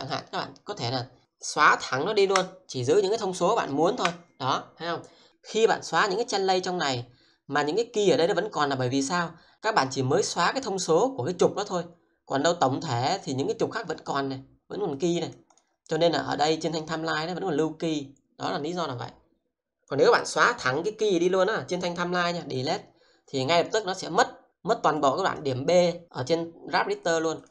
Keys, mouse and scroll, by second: 0.1 click, 2.1 Delete, 3.7 click, 4.0 Delete, 5.1 click, 6.3-6.8 scroll up 1, 8.3 click, 12.9 click, 15.2 double click, 15.5 click, 16.4-20.0 drag, 20.0 right click, 22.6 click, 25.4 double click, 27.0 click, 27.4 double click.